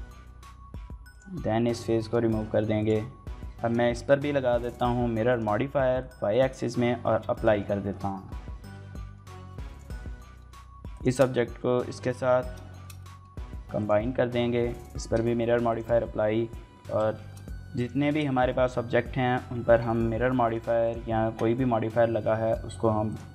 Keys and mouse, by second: 0.0-3.0 typing, 0.1 shift+click, 0.6 click, 1.3 click, 1.7 shift+click, 1.9 click, 3.1 Tab, 3.2 middle click, 3.4 shift+middle click, 4.5-5.2 drag, 5.8 drag, 6.1 drag, 6.8 ctrl+a, 7.1 shift+drag, 7.3 click, 7.9 KP_Divide, 8.7 middle drag, 9.5 drag, 10.0 shift+middle click, 10.2 middle click, 10.7 shift+click, 11.9 ctrl+j, 12.5 shift+middle click, 12.8 middle click, 13.6 click, 14.6 ctrl+a, 15.5 shift+click, 16.4 ctrl+j, 16.9 shift+click, 17.6 click, 18.2 shift+click, 18.4 click, 19.2 ctrl+a, 20.6-21.5 drag, 22.0 ctrl+a, 22.9 shift+click.